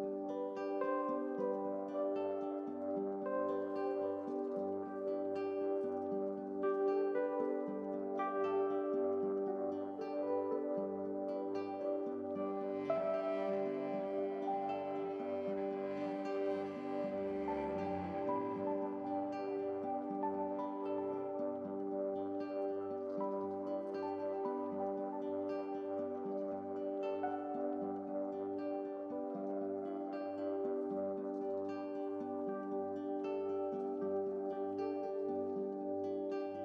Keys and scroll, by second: 1.3 ctrl+z, 2.1 ctrl+z, 10.2 ctrl+z, 10.5 ctrl+z, 10.7 ctrl+z, 14.2 ctrl+z, 14.5 ctrl+z, 16.7 ctrl+z, 21.9 x.